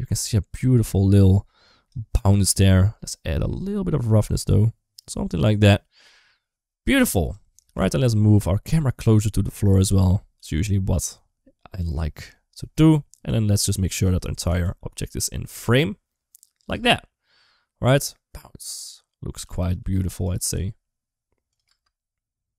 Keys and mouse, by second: 2.1 click, 3.3-5.4 drag, 7.0 click, 7.5 g, 10.2 g, 13.1 click, 14.2 r, 16.5 space, 18.5 space, 19.2 r, 20.3 g, 21.5 space.